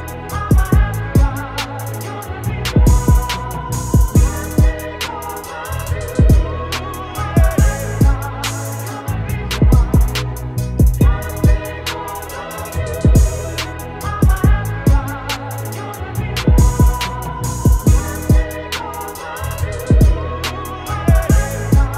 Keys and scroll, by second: 3.9 Return, 6.3 Return, 14.4 b, 16.1 ctrl+z, 20.9 ctrl+space.